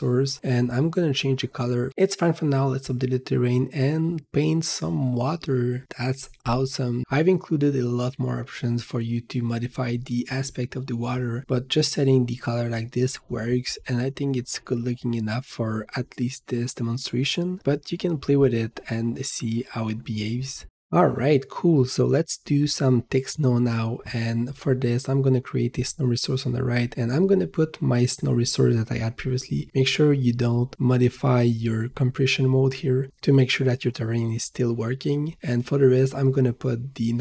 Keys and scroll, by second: 1.8 ctrl+s, 2.7 v, 5.0 g, 24.7 w.